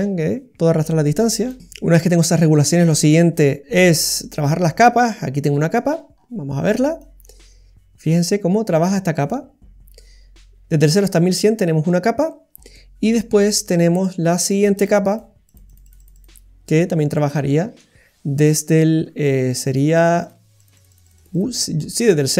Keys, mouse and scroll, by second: 3.6 scroll up 2, 4.0-4.3 scroll down 2, 4.3 middle click, 4.9-5.4 scroll up 7, 5.4 middle click, 6.0-6.7 scroll up 4, 7.0 click, 12.5-13.3 scroll down 3, 12.7 middle click, 13.9-16.0 click, 17.1 click, 17.1 middle click, 19.4 click, 19.9 click, 19.9 click, 20.2 click, 20.9 click.